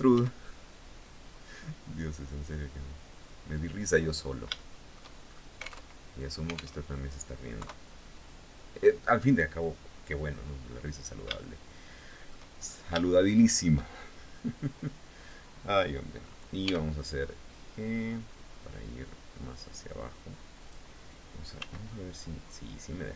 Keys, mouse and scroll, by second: 3.3 click, 3.7 scroll down 2, 4.1 shift+middle click, 4.8 shift+scroll up 3, 5.3 alt+Tab, 6.3 alt+Tab, 7.1 KP_3, 10.9-12.0 shift+middle drag, 12.1-12.5 shift+scroll up 3, 12.6 shift+middle click, 16.2 g, 20.1 click, 21.1 s.